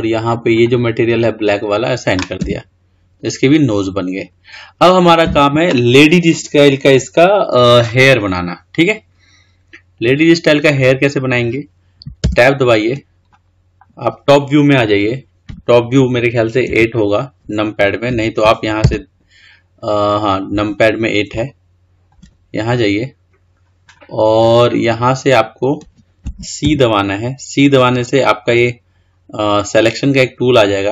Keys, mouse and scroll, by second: 0.3 click, 1.1-2.3 drag, 2.3 Tab, 3.5-4.0 scroll down 1, 4.0-4.5 scroll up 3, 4.5-7.6 scroll down 2, 12.1 Tab, 13.2-16.1 middle drag, 16.5 KP_8, 21.2-22.4 shift+middle drag, 22.4 scroll up 1, 24.1-24.5 scroll down 2, 24.5-26.5 scroll up 3, 26.5 c.